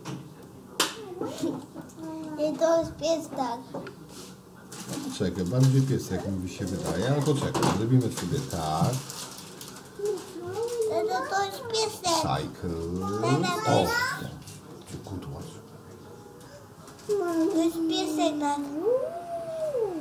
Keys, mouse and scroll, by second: 0.4-1.6 middle drag, 1.8 middle click, 3.9 ctrl+alt+KP_0, 6.3 click, 8.4 click, 10.1 click, 10.9-12.3 drag, 18.7 middle click.